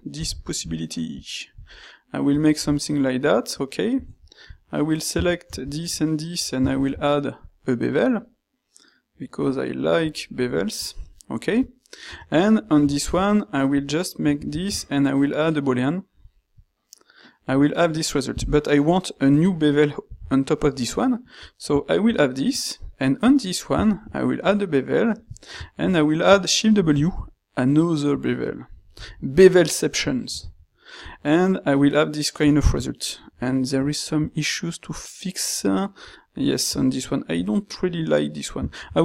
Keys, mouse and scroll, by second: 0.2 g, 1.6 s, 6.7 ctrl+shift+q, 14.4 ctrl+shift+q, 23.9 ctrl+shift+q.